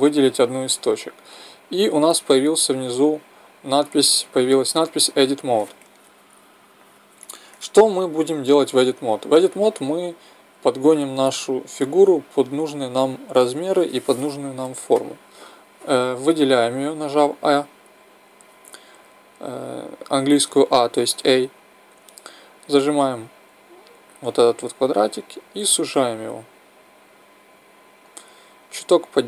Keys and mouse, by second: 11.2 a, 12.1 a, 24.5-28.2 drag.